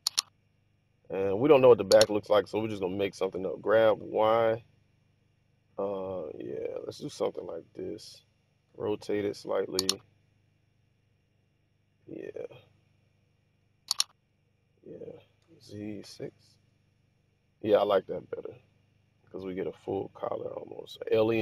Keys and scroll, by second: 3.2 g, 3.9 y, 8.7 r, 13.2-13.9 typing, 15.6 z, 16.1 6.